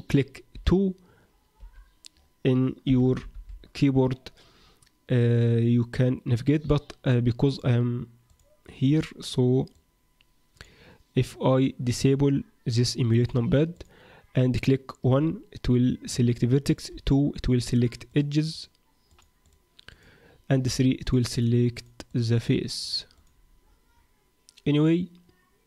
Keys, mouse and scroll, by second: 0.5 KP_2, 1.6 KP_2, 2.8 KP_8, 3.0 KP_8, 3.3 KP_8, 7.4 click, 16.9 2, 17.7 click, 18.0 click, 19.0 click, 19.4 click, 19.9 click, 20.6 3, 21.0 click, 21.3 click, 21.7 click, 22.3 click, 22.8 click, 23.1 click.